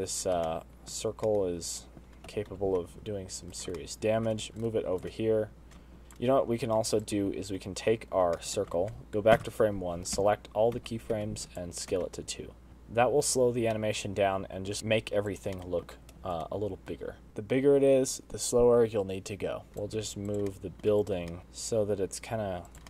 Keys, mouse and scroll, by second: 0.6-1.1 scroll up 4, 1.2 shift+middle click, 1.8 scroll up 1, 2.0 middle click, 3.1 g, 4.5 shift+middle click, 4.5 shift+scroll up 1, 5.0 scroll down 1, 5.4 shift+right click, 6.0 g, 6.8 click, 6.9-7.2 scroll up 1, 7.2-7.8 scroll down 4, 7.8 click, 8.1 scroll up 3, 9.1 shift+middle click, 10.2 shift+Left, 11.0 a, 11.5 s, 12.7 space, 14.5 middle click, 16.1 click, 16.3 middle click, 17.1 shift+right click, 19.7 middle click, 19.7 click, 21.1 click, 21.4 shift+middle click, 21.4-21.8 scroll up 1, 21.4 g.